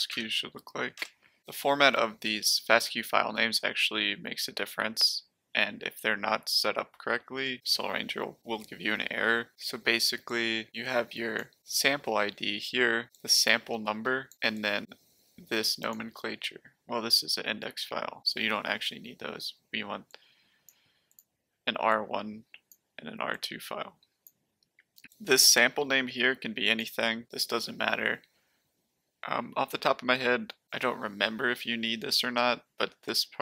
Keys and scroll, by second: 0.1 Tab, 0.9 Return.